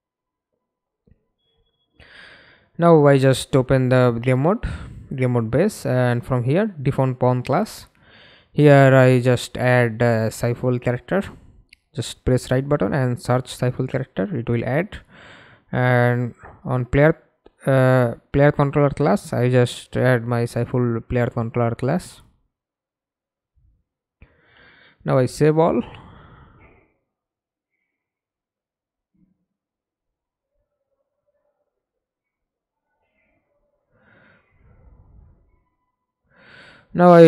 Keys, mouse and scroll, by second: 3.6 double click, 9.1-10.3 typing, 14.8-16.2 typing, 21.1 middle click, 21.6 ctrl+space, 27.8 double click, 29.7 middle click, 33.5-34.4 scroll down 6, 35.0-35.3 scroll down 4, 35.3-36.3 scroll up 3.